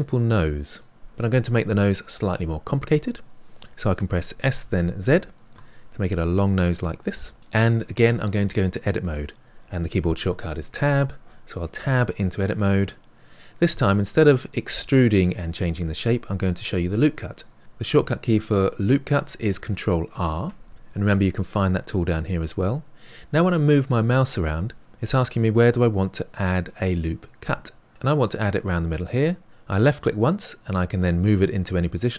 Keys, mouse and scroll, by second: 4.0 s, 6.3-7.4 middle drag, 10.8 Tab, 13.4-14.2 scroll up 2, 14.2-17.3 middle drag, 20.4 ctrl+r.